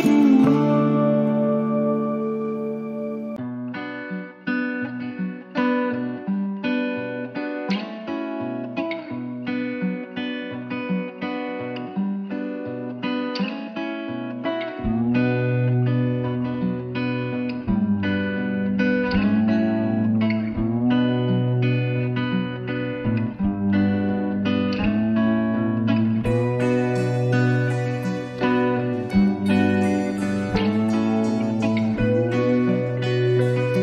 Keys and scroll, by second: 0.9 ctrl+d, 24.5 ctrl+-.